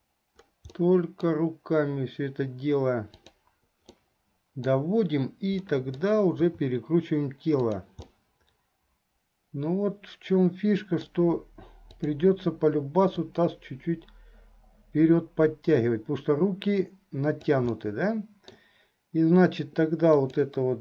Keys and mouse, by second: 1.0 middle click, 3.1 click, 4.1 middle click, 5.8 middle click, 6.6 r, 8.3-11.3 middle drag, 13.5-17.8 drag, 17.8 middle click, 20.2 click.